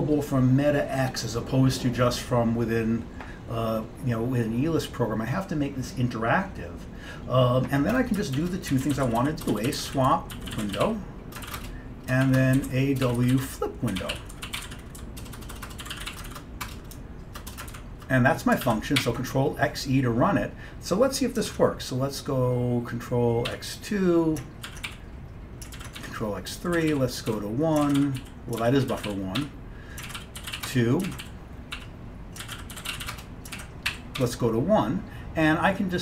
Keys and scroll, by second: 8.2-17.8 typing, 11.6 Return, 18.7 ctrl+x, 19.0-19.8 typing, 21.6 ctrl+x, 23.4-34.8 typing, 24.8 ctrl+x.